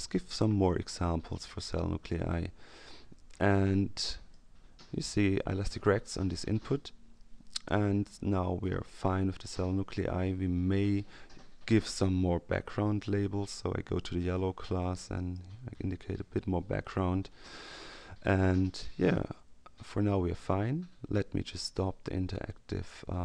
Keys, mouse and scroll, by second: 0.6-1.7 drag, 3.7 click, 13.5 k, 15.1 click.